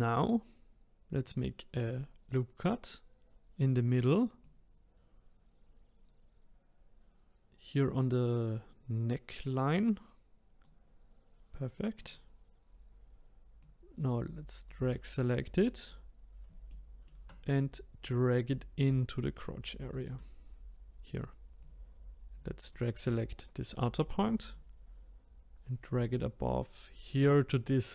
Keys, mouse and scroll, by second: 1.2-4.4 drag, 7.4-12.0 drag, 12.7 click, 13.7-18.0 drag, 16.1-16.7 scroll, 16.7-18.0 shift+right drag, 18.2-21.7 drag, 24.5 click.